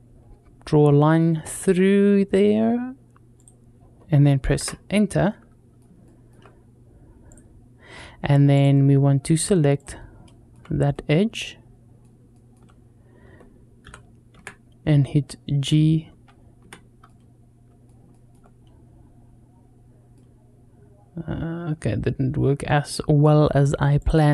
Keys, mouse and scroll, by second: 0.2 scroll up 1, 2.8-4.1 scroll up 1, 4.1-4.7 scroll up 1, 4.7 scroll up 1, 5.1 middle click, 5.9 shift+middle click, 7.1 click, 8.4 click, 8.8-9.6 scroll up 1, 9.6 click, 10.1 shift+middle click, 10.7-12.0 middle drag, 12.1 shift+middle click, 13.7 g, 16.9 middle click, 17.9 shift+middle click, 18.8-19.4 scroll down 2, 19.4-20.0 scroll up 1, 20.0-22.7 middle drag, 23.8 click.